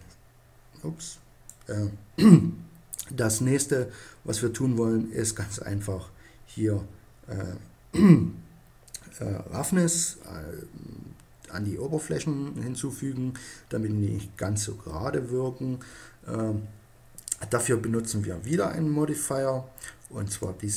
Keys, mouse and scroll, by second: 0.7 middle click, 1.9-4.2 middle drag, 20.0-20.7 middle drag.